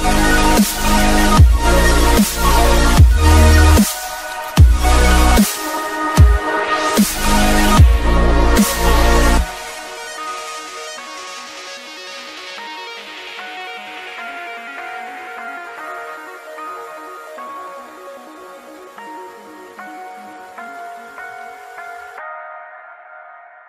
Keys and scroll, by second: 2.7 ctrl+d, 21.2 ctrl+z.